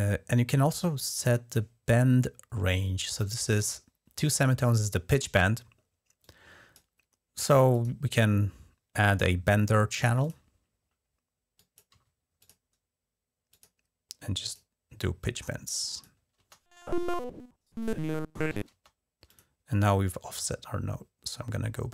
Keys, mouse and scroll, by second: 6.0 click, 7.5 click, 10.0 click, 10.2 click, 11.7 d, 12.2 click, 13.3 click, 14.2 click, 15.0 click, 16.2 typing, 18.5 space, 19.0 click, 21.0 click.